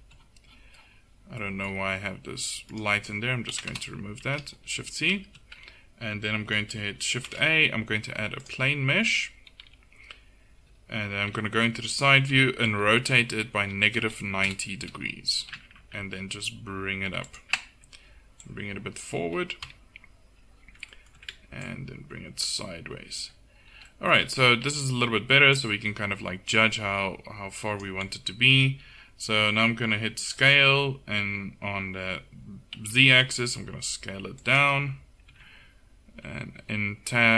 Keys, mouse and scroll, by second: 2.8 click, 3.6 Delete, 4.3 shift+c, 7.3 shift+a, 9.6 KP_7, 10.6 KP_3, 12.3 r, 15.4 g, 18.4-19.7 drag, 19.7 KP_1, 23.5-24.9 middle drag, 25.6-27.6 middle drag, 30.3 s, 35.3 Tab.